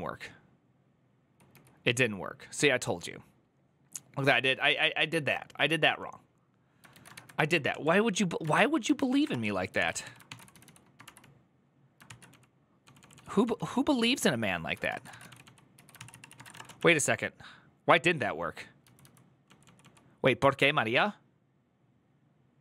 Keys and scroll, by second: 0.0-0.4 typing, 6.7 ctrl+a, 6.9 1, 7.5 ctrl+n, 7.9-17.2 typing, 11.8 ctrl+c, 18.3-20.1 typing.